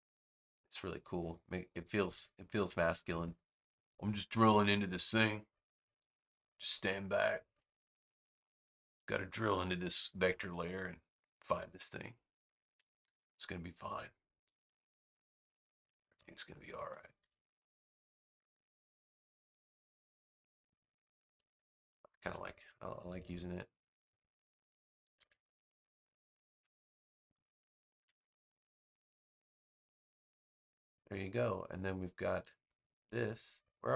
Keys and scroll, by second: 2.5 super+v, 9.9 space, 12.9 super+x, 17.1 super+v, 21.6 space, 25.1 super+x, 27.9 super+v.